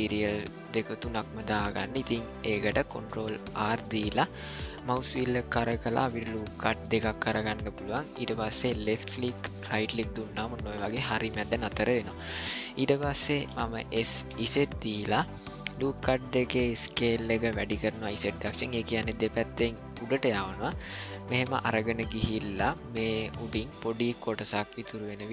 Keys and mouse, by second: 3.5 ctrl+r, 12.4 middle click, 12.9 ctrl+middle click, 13.9 s, 23.7 middle click, 25.2 shift+middle click.